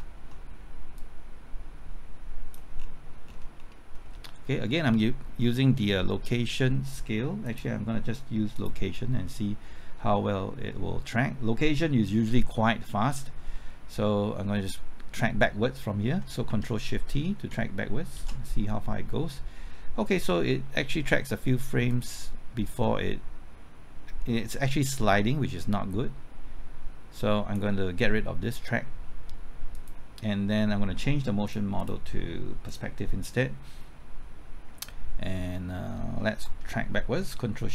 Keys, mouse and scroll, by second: 1.0-2.8 drag, 2.8-3.3 scroll down 1, 3.9-7.4 scroll up 1, 7.4 click, 13.5 middle click, 16.5 typing, 18.2 ctrl+shift+t, 20.0 scroll down 1, 20.2 middle click, 21.9-28.1 drag.